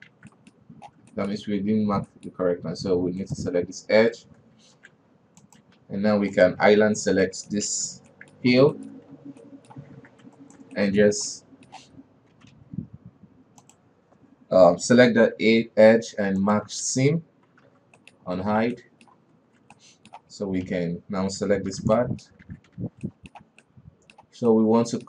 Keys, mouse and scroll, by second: 0.0-0.6 middle drag, 0.6 alt+a, 0.8-1.1 middle drag, 1.1-1.5 scroll up 1, 1.6 shift+middle click, 1.8 scroll up 1, 2.3 alt+KP_2, 2.5-2.9 middle drag, 2.9 scroll up 1, 3.7 right click, 5.0 ctrl+e, 6.2 alt+KP_3, 6.8 right click, 7.0 l, 7.4 scroll down 4, 7.7-8.3 middle drag, 8.3 shift+h, 8.6-8.9 middle drag, 8.9-9.6 scroll up 4, 9.2 shift+middle drag, 9.6 alt+KP_2, 9.9-10.5 middle drag, 10.5 alt+a, 10.8 alt+right click, 11.2-12.8 shift+middle drag, 12.8 g, 16.4 ctrl+e, 17.4 alt+a, 18.1 alt+h, 18.4 middle drag, 18.6-19.0 scroll down 4, 19.1 alt+a, 19.2 alt+middle click, 19.8 alt+KP_3, 20.2-21.1 middle drag, 21.1 l, 22.1 shift+h, 22.4-22.9 middle drag, 22.9 alt+a, 23.2 alt+KP_2, 23.5-25.0 middle drag.